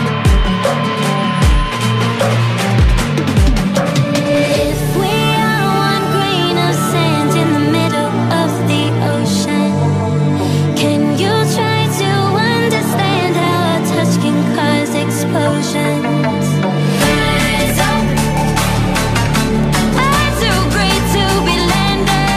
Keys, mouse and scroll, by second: 7.4 Delete, 8.7 click, 9.6 ctrl+c, 9.9 click, 10.2 ctrl+v, 10.7 ctrl+t, 11.2 ctrl+0, 11.7 click, 12.4 0, 13.0 click, 16.2 Return, 16.4 Up, 17.4 click.